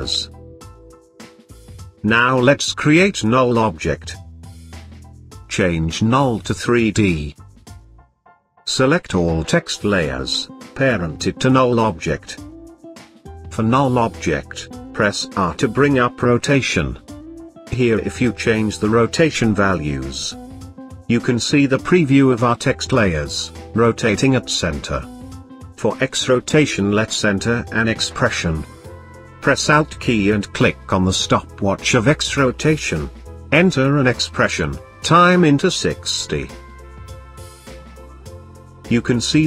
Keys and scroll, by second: 14.7 r.